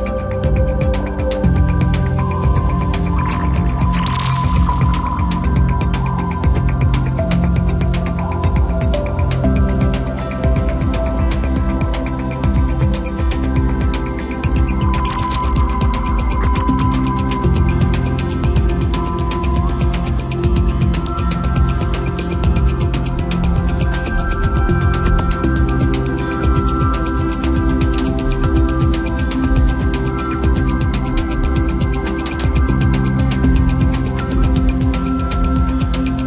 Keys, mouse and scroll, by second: 7.2-7.6 scroll down 2, 7.6 Tab, 8.2-9.8 middle drag, 9.8 scroll up 2, 10.1-11.2 middle drag, 11.2 3, 11.6 click, 12.2 shift+click, 12.4 shift+click, 13.2 ctrl+KP_Add, 13.8 ctrl+KP_Add, 15.6 drag, 16.3-17.5 drag, 17.5 3, 18.2 click, 18.4 click, 20.8 shift+click, 23.4-24.5 middle drag, 24.5-24.8 scroll up 2, 25.7 shift+click, 25.9 shift+click, 27.1 ctrl+z, 29.9 shift+click, 31.0 shift+click, 31.5-31.9 scroll down 2, 31.9-33.0 middle drag, 33.0 click, 33.9 click, 34.2 scroll down 2, 34.4-36.2 middle drag.